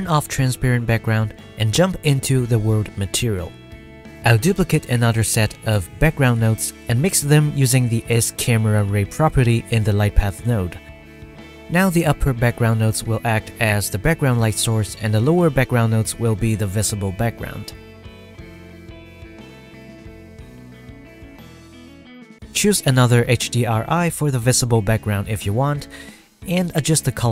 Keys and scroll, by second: 1.3 ctrl+s.